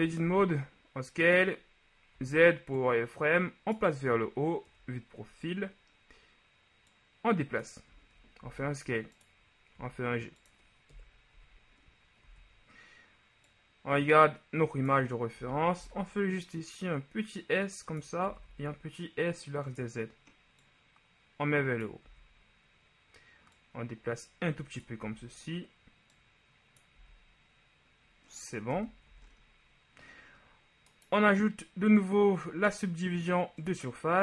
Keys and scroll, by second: 0.3 s, 2.3 z, 4.9 KP_3, 8.6 shift+s, 9.9 g, 11.1 KP_1, 11.5 z, 15.6 s, 15.9 x, 18.5 s, 18.7 z, 22.4 z, 25.1 z, 28.9 Tab, 29.2 a.